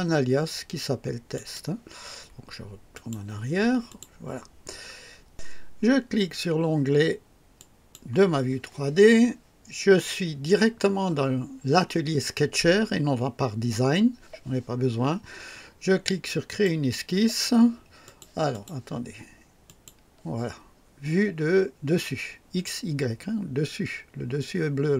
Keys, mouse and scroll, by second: 1.4 click, 3.0 click, 3.9 click, 7.6 click, 16.5 click, 18.0 click, 18.5 click, 19.6 click.